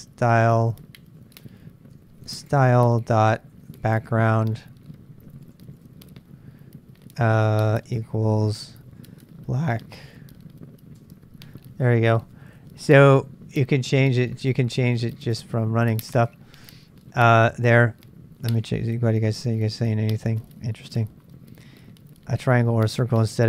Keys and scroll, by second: 0.0-6.3 typing, 7.6-11.0 typing, 18.5 super+Tab, 18.6 super+Tab.